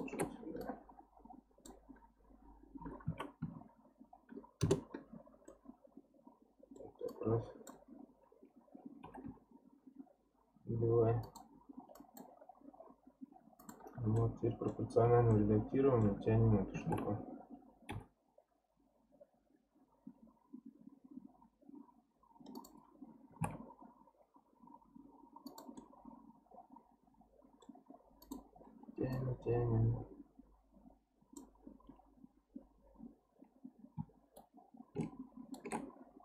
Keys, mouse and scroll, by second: 0.6 click, 2.8 r, 5.5-7.1 middle drag, 7.1 click, 7.9-9.1 scroll up 2, 9.1 g, 11.9 click, 12.4-13.4 scroll down 2, 13.4-14.2 scroll down 1, 13.6 click, 14.2 middle click, 14.9 scroll up 2, 15.3-16.7 middle drag, 16.7 g, 25.8-28.2 middle drag, 28.2 click, 29.1 click, 34.4-36.2 shift+right drag.